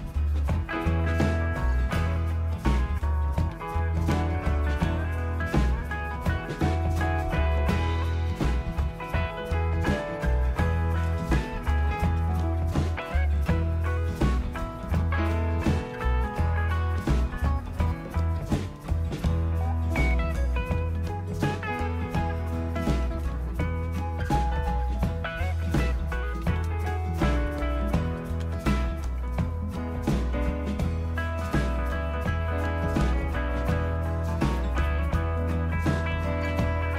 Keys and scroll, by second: 2.1 typing, 3.5-4.5 typing, 7.0-7.7 typing, 11.1 space, 14.5-17.7 typing, 19.6-21.5 typing, 23.2 Return, 26.2-26.7 typing, 27.8-28.4 typing.